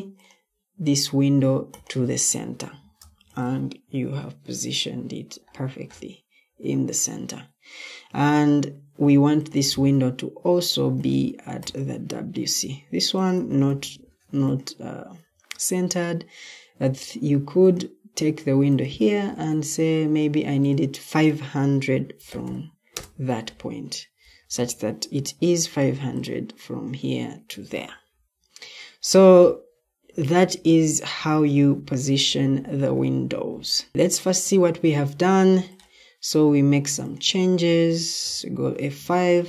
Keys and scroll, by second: 2.4 Escape, 4.0 Delete, 13.9 ctrl+d, 15.1 Escape, 16.7 ctrl+d, 19.2 ctrl+d, 21.8-22.8 typing, 24.2 Escape, 25.0 m, 27.5 Escape, 38.1 F5.